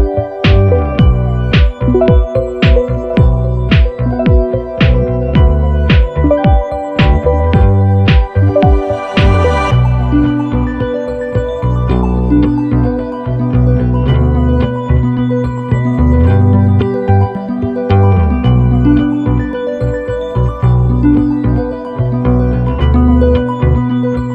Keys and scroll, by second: 2.7 i, 12.7 i, 20.6 i, 22.7-23.6 typing.